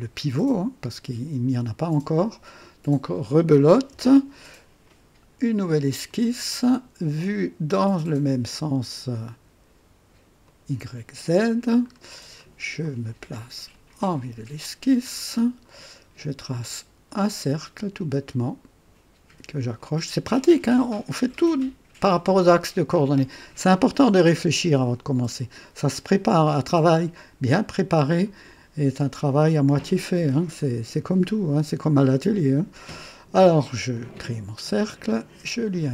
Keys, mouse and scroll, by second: 0.0-2.4 drag, 2.6 click, 3.9 KP_0, 4.4-5.0 right drag, 6.0 click, 10.4 click, 11.9-12.2 scroll up 2, 12.4 right click, 13.7 click, 14.6-14.9 scroll up 2, 15.2 right click, 17.2 click, 19.7 click, 33.9 click, 34.5 right click, 35.6 click.